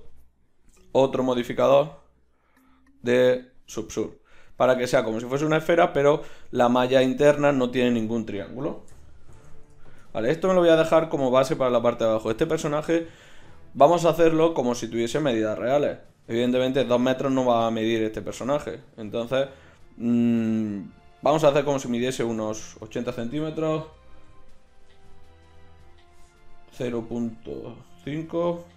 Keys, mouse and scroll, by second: 0.5 ctrl+shift+q, 4.4 x, 5.4-6.2 right drag, 6.2 Tab, 6.7 right click, 9.0 KP_1, 9.3 Tab, 22.4 Tab, 24.2 s.